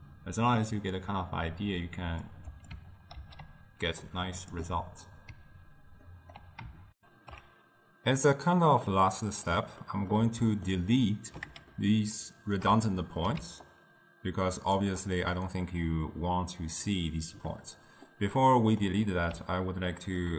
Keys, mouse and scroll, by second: 1.0 drag, 2.7 click, 3.2 ctrl+h, 4.1-6.1 drag, 6.1-7.0 ctrl+middle drag, 7.0 ctrl+alt+shift+w, 8.9-13.5 middle drag, 13.5 d, 13.7-14.8 drag, 14.8 d, 14.9 d, 17.4 d, 18.5-20.3 middle drag.